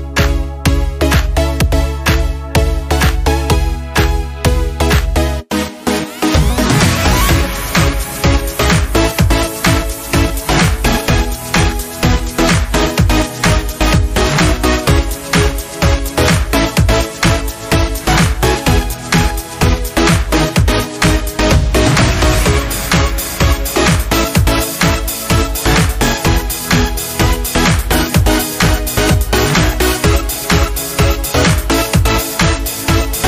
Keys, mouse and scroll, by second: 0.2 click, 7.4 shift+click, 9.7 shift+click, 11.6 scroll up 1, 11.9 scroll down 1, 12.4 click, 12.7 space, 16.1 click, 18.3 click, 19.5 right click, 23.7 click, 26.0 scroll down 1, 28.3 click, 31.2 click.